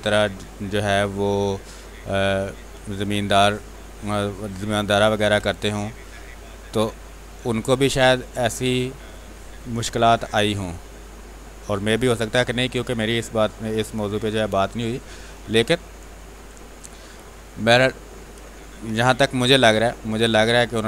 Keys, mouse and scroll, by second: 2.8 x, 3.0-5.1 drag, 5.1 x, 5.3 space, 5.5 click, 6.1 space, 6.6 click, 7.8-10.3 drag, 10.3-11.8 drag, 11.8-13.4 drag, 13.4-17.1 drag, 17.1-19.1 typing, 17.4 click, 18.7 click, 20.3-20.8 drag.